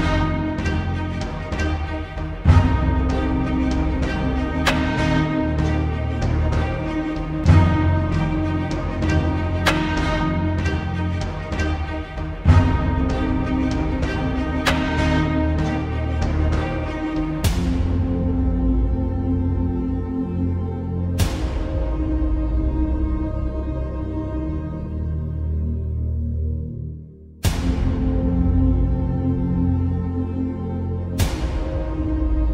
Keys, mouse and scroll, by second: 0.1-3.6 ctrl+drag, 4.3 Return, 5.4-5.7 alt+scroll up 1, 6.2 click, 8.9 alt+scroll up 1, 9.1 space, 9.3-9.9 click, 9.6 space, 10.5 click, 11.5 alt+scroll up 2, 11.8 space, 11.9 click, 14.1 right click, 15.9 click, 26.5 right click, 27.6-32.5 drag.